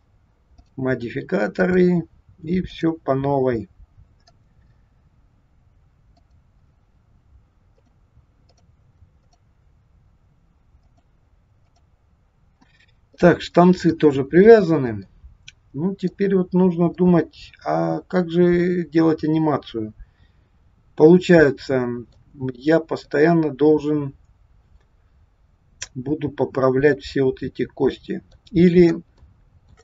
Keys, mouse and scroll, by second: 0.6 click, 1.6 click, 4.2 click, 7.7 click, 8.5 click, 9.4 click, 10.8 click, 12.8 scroll down 2, 13.2 middle click, 15.1 middle click, 16.3-17.1 scroll up 2, 17.1 middle click, 22.3-22.7 scroll down 3, 23.1 middle click, 28.7-29.0 scroll up 1, 29.3 shift+middle click.